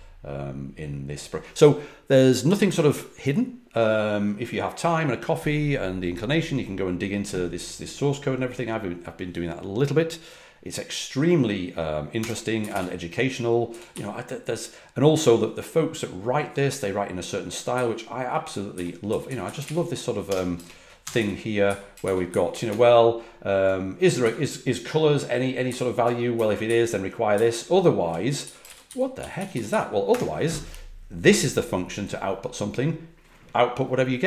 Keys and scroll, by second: 12.2 Escape, 12.3-14.4 typing, 17.7-20.1 typing, 20.2 Escape, 21.0 Escape, 21.1-24.2 typing, 25.6 typing, 28.1-30.6 typing.